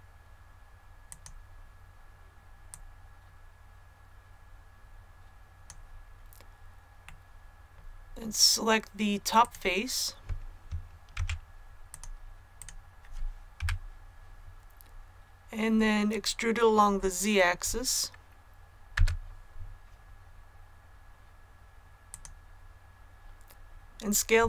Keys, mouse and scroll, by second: 1.0-5.6 drag, 7.0-8.6 middle drag, 9.3 right click, 11.1 Tab, 11.8 click, 12.5 right click, 13.7 KP_1, 18.9 e, 22.0 click.